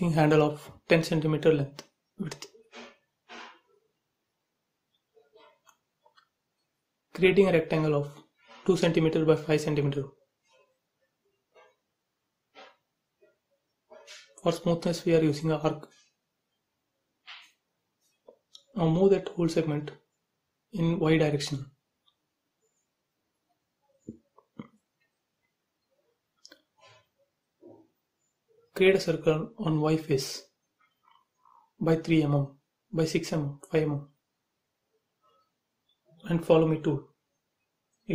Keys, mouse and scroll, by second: 0.0 click, 0.8-3.3 typing, 1.5 Return, 3.6 click, 4.3-6.3 typing, 7.4 click, 8.8 space, 9.1 scroll up 1, 10.2 a, 10.8 click, 13.7 space, 14.9 click, 15.7 Delete, 16.6 shift+e, 17.0 space, 17.3 click, 18.5 scroll down 1, 19.9 middle click, 20.3 scroll down 1, 20.6 shift+middle click, 21.6 m, 21.7 click, 22.9 Left, 24.2 click, 24.4 space, 24.6-25.5 scroll up 1, 25.6 shift+middle click, 26.2-27.4 scroll down 1, 27.4 c, 30.5 click, 31.8-33.2 typing, 33.4-34.5 scroll up 1, 35.0 click, 36.6 space, 37.8 click.